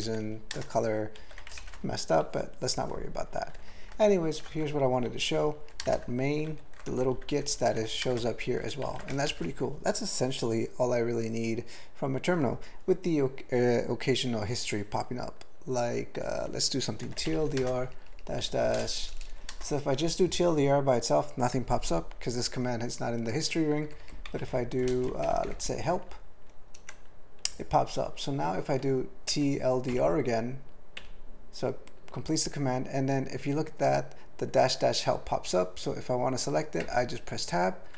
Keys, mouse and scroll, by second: 0.1 ctrl+f, 0.2 ctrl+f, 0.5 ctrl+space, 1.2 ctrl+g, 1.6 alt+shift+., 3.7 ctrl+p, 3.9 ctrl+e, 4.6 alt+b, 4.9 alt+b, 5.3 alt+b, 5.8 ctrl+space, 5.9 ctrl+e, 6.5 ctrl+g, 7.0 alt+b, 7.2 alt+b, 7.4 alt+b, 7.7 alt+f, 8.1 ctrl+space, 8.5 ctrl+g, 8.9 ctrl+n, 9.3 alt+shift+., 17.0 typing, 18.7-19.5 typing, 24.9 alt+BackSpace, 25.1-25.9 typing, 26.8 Return, 28.8-29.9 typing, 31.0 ., 36.8 Tab.